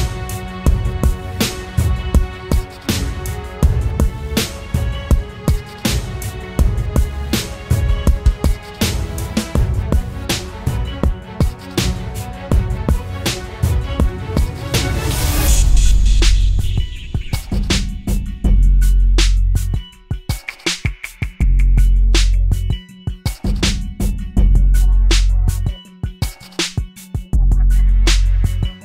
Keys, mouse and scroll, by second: 2.4 ctrl+t, 5.2 ctrl+click, 7.0 ctrl+click, 10.0 Return, 17.6 double click.